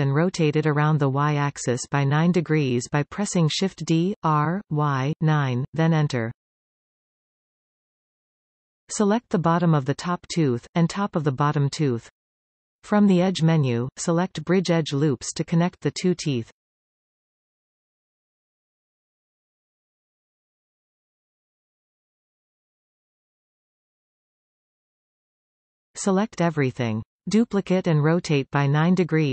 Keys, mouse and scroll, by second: 0.7 middle click, 3.7 shift+d, 5.9 Return, 8.5-9.7 middle drag, 10.3-11.7 middle drag, 10.3-10.7 scroll up 2, 11.7 alt+a, 11.9-12.7 middle drag, 11.9-12.7 scroll up 2, 13.2 b, 18.7-23.1 middle drag, 23.1-24.7 drag, 24.7-28.4 middle drag, 25.6-27.7 scroll down 2, 27.7 a, 28.4-29.3 scroll down 1.